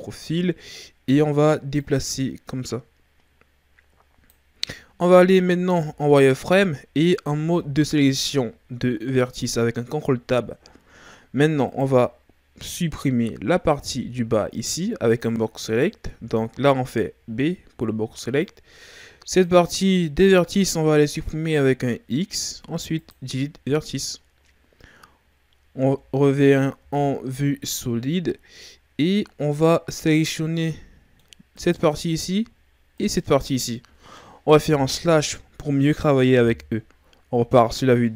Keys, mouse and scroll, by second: 0.2-0.6 shift+scroll down 3, 0.6-1.8 scroll up 3, 1.8 click, 4.8-5.7 scroll up 2, 5.7 z, 7.4 ctrl+Tab, 10.2-10.8 shift+scroll down 3, 10.8-11.2 scroll up 1, 11.7-13.9 right drag, 13.9 b, 15.6 right click, 16.1 b, 22.2 x, 25.8 Tab, 25.8 middle click, 26.8 z, 27.4-28.3 scroll down 3, 28.3-30.0 scroll up 1, 30.0 scroll down 3, 30.3-31.6 middle drag, 31.6 right click, 33.0 shift+right click, 34.9 KP_Divide, 37.3 KP_3.